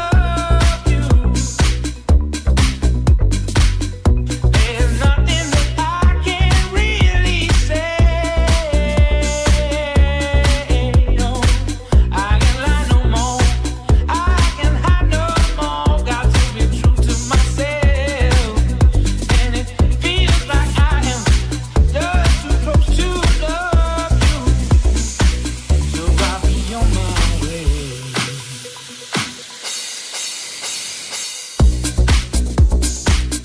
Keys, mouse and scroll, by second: 0.0 click, 1.8 click, 1.9-4.7 drag, 3.7 c, 5.3 click, 7.3 shift+click, 7.8 c, 9.7-13.1 shift+drag, 13.0 c, 15.2 click, 16.7-20.8 drag, 16.8 c, 22.6-33.4 drag, 32.2 c.